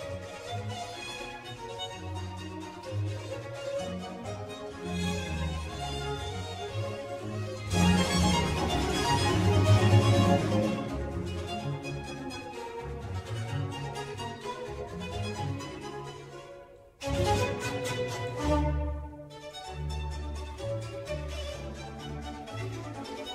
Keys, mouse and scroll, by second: 1.7 click, 2.1 Tab, 2.4 scroll down 2, 2.9 click, 3.5-3.9 scroll up 2, 4.6 Tab, 5.5-6.7 scroll up 3, 6.7-9.1 shift+middle drag, 9.1 alt+click, 10.8 s, 15.4-15.7 scroll up 1, 15.7-18.0 middle drag, 18.0 Tab, 18.3 click, 18.6-19.1 scroll down 1, 19.1 click, 19.6 scroll up 1, 20.0-20.4 shift+middle drag, 20.4-20.8 scroll up 1, 20.8 click, 21.2-23.3 middle drag.